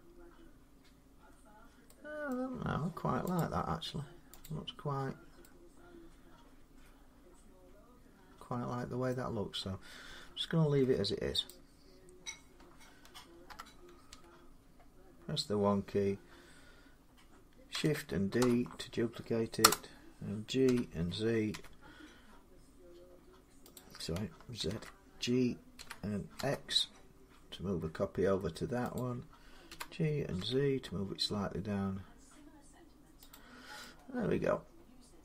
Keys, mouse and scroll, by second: 0.1 scroll down 2, 2.1 middle click, 3.2 click, 4.2 click, 4.7 scroll down 1, 8.9 middle click, 9.9 Tab, 10.6 Tab, 11.3 click, 13.3-13.9 typing, 15.7 click, 15.7 1, 18.2 shift+d, 19.4 Return, 20.5-21.3 typing, 23.6 click, 24.5 ctrl+z, 25.6 g, 26.2 g, 28.8 click, 29.5-30.2 typing, 32.0 z, 33.1 click.